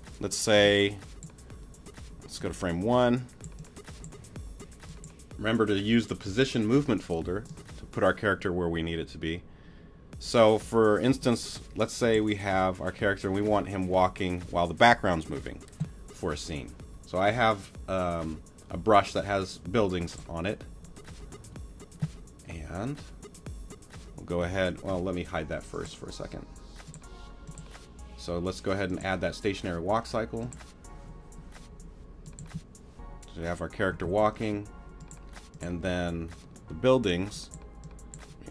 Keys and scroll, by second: 32.4 space, 33.9 space.